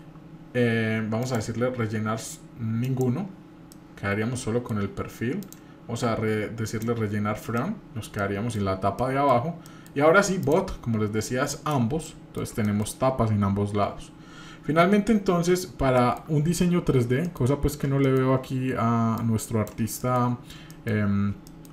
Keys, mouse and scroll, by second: 1.2-3.0 drag, 3.7 middle click, 5.4-6.8 drag, 7.3-8.0 scroll down 2, 7.6-8.1 middle drag, 8.2-8.6 shift+middle drag, 9.0 middle click, 9.6 middle click, 10.4-11.7 drag, 12.0-12.4 middle drag, 12.6-12.9 shift+middle drag, 16.0 shift+middle drag, 16.6-17.2 scroll down 5, 17.2 shift+middle click, 17.5-17.8 scroll up 2, 18.1 shift+middle drag, 19.2 click, 20.0 shift+middle click, 20.4 scroll up 1, 20.7 shift+middle click, 21.5 shift+middle click.